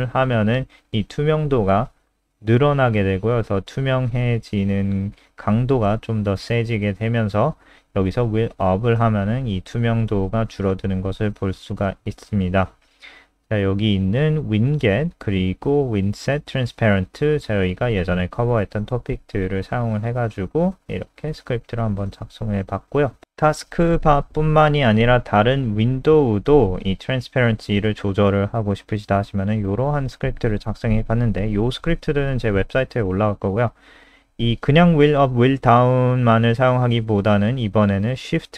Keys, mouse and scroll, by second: 0.0 click, 5.5 scroll down 2, 6.2-7.6 scroll down 18, 7.6-10.7 scroll up 33, 10.9 click, 18.0-18.7 scroll down 5, 18.7 click, 19.1-20.1 scroll down 2, 20.3-21.4 scroll down 2, 21.6-22.0 scroll up 2, 22.0 click, 22.7 Up, 22.7 Right, 23.4-24.6 scroll down 10, 24.6 shift+click, 25.0 ctrl+c, 25.1 click, 26.0 scroll up 3, 26.6 click, 27.4 Right, 27.6 ctrl+shift+End, 28.0 ctrl+v, 28.3 ctrl+s, 28.8 click, 29.9 scroll up 2, 30.7 click.